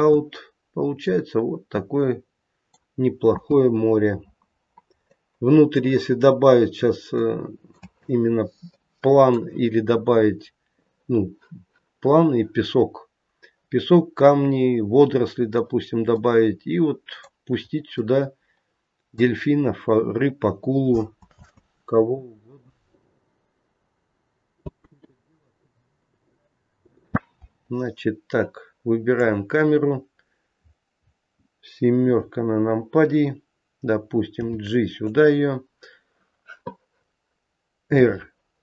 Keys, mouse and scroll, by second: 0.7 scroll up 1, 1.0 middle click, 3.3 space, 4.5-5.2 scroll up 2, 5.0 middle click, 6.5-7.1 scroll down 3, 7.1 middle click, 7.8 space, 8.6 middle click, 16.1 middle click, 17.7 scroll up 2, 17.9 middle click, 19.6-20.7 scroll down 1, 20.7 scroll down 1, 21.3 space, 24.7 space, 25.9 click, 26.8 click, 27.7-28.3 scroll down 1, 29.2 click, 29.2-29.8 scroll down 2, 32.0 KP_7, 34.4 g, 37.9 r.